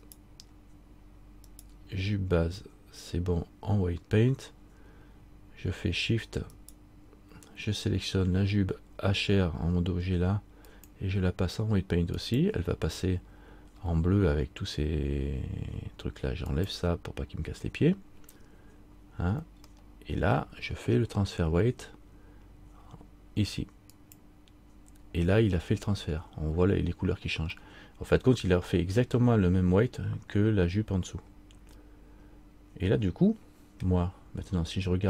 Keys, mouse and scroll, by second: 0.2 shift+right click, 6.7 shift+right click, 10.8 shift+click, 16.7 shift+click, 20.0 middle click, 24.1 shift+click, 27.8 middle click, 28.9 middle click, 31.8 middle click.